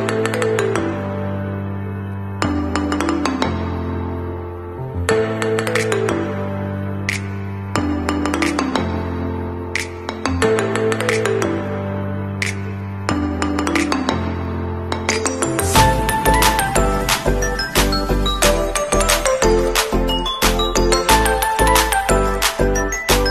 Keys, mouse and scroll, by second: 0.0 scroll up 1, 4.4 alt+scroll down 1, 6.1 click, 15.7 KP_5, 17.3 KP_3, 19.3 shift+click, 19.5 shift+click, 20.4 click.